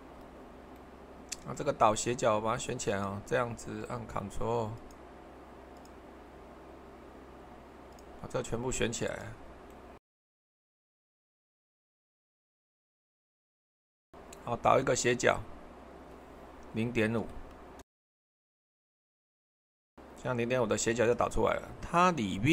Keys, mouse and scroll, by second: 17.2-18.1 typing, 18.1 Return.